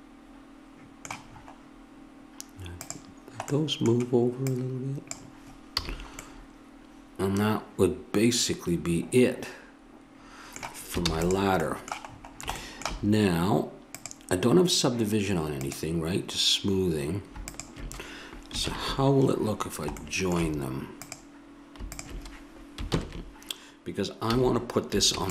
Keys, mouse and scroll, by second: 0.2-2.0 middle drag, 2.8-5.7 right drag, 5.7 a, 5.8 click, 6.9 middle click, 11.1 ctrl+s, 13.9-18.6 right drag, 18.6 ctrl+j, 21.0-22.9 drag, 22.9 ctrl+j, 24.2 a, 25.1 ctrl+s.